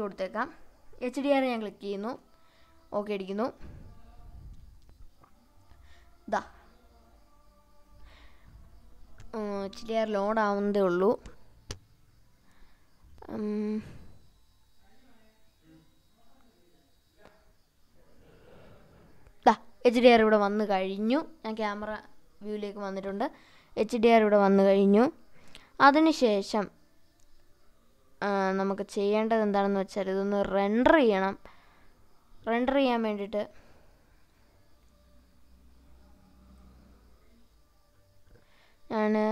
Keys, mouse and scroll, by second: 8.1 middle click, 19.0 click.